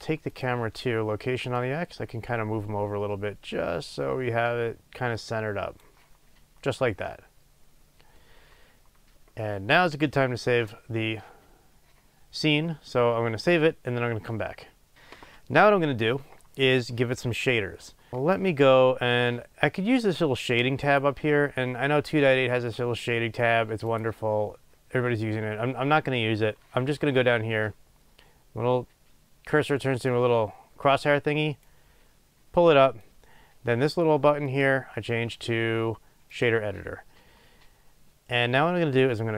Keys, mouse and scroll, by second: 1.5-18.3 drag, 21.2 click, 23.8-39.3 drag.